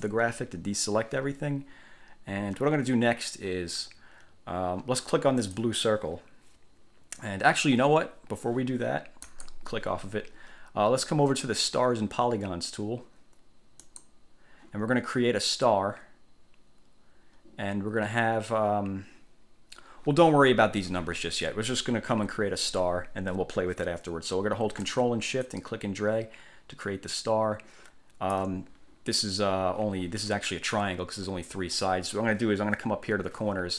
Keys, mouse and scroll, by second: 0.0 click, 5.5 click, 9.4 click, 14.0 click, 25.7-28.7 ctrl+shift+drag.